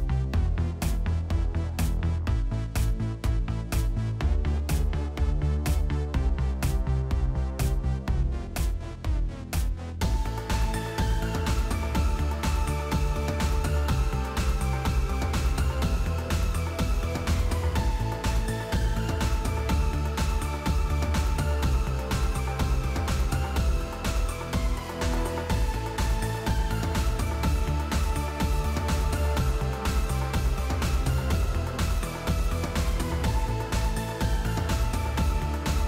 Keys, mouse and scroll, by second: 0.3 ctrl+c, 0.6 ctrl+d, 1.0-2.5 typing, 3.8 space, 4.0 space, 5.0 space, 6.5 click, 6.9 click, 7.4-8.6 typing, 9.3 click, 9.7 click, 9.9 click, 11.7 click, 12.7 click, 13.4 click, 14.7 8, 14.8 8, 17.5 click, 18.7 click, 19.4-20.9 typing, 21.0 Tab, 22.3-24.4 typing, 25.9 space, 26.2 space, 27.8 space, 28.3 space, 29.4 typing, 30.4 space, 30.9 click, 31.5 ctrl+c, 32.5 ctrl+d, 32.9 ctrl+d, 33.8 click, 34.1 click, 34.3 right click, 35.3 click.